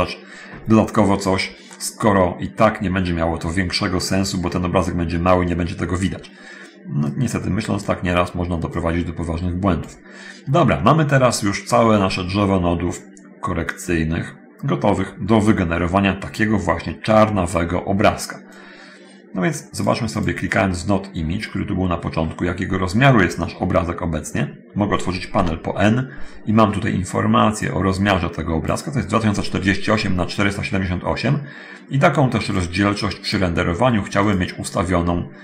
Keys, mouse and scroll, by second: 0.9-1.5 scroll down 1, 1.8-3.5 middle drag, 6.9-8.2 drag, 8.9-9.9 drag, 11.3-12.1 scroll down 1, 12.1-13.7 middle drag, 18.7-20.2 drag, 20.3 click, 21.3-21.7 scroll up 1, 22.1 middle click, 22.7-23.3 scroll up 2, 25.5 n, 27.9-29.1 drag, 32.4-33.7 drag, 34.3 click.